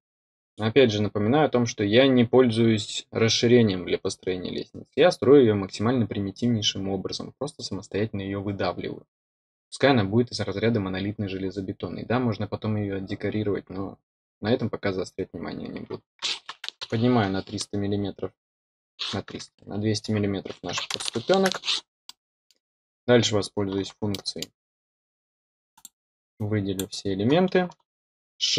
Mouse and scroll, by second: 22.0 middle click, 24.0 middle click, 25.7 click, 26.3-26.7 drag.